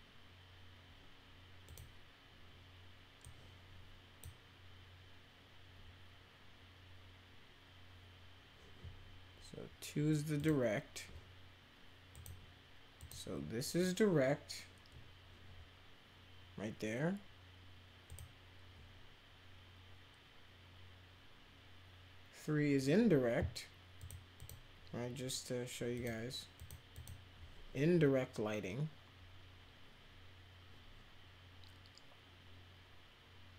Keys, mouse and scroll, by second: 1.6 click, 3.2-4.2 drag, 10.3 click, 12.1 click, 13.0 click, 18.0 click, 24.0 click, 24.3 click, 25.9 click, 26.6 click, 26.9 click.